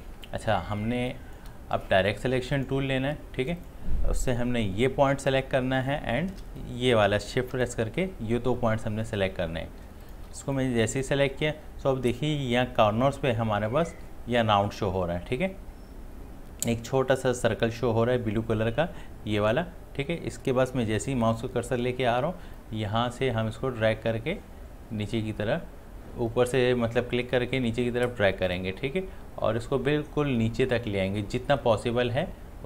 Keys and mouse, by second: 1.0 click, 1.1-10.1 drag, 9.8 space, 10.4 space, 10.6 click, 10.9 space, 22.6-32.6 drag.